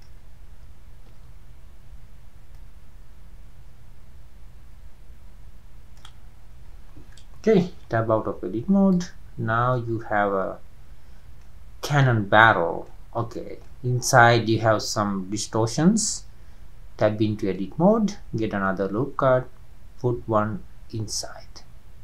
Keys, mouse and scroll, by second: 1.5 ctrl+z, 3.0-5.7 drag, 6.4-7.2 scroll down 7, 8.4-8.9 scroll down 1, 8.9 drag, 9.2-9.7 scroll up 4, 9.7-16.5 middle drag, 16.5 Tab, 17.0 scroll down 1, 17.0-20.0 middle drag, 20.7 scroll up 3, 21.1-21.8 scroll down 3.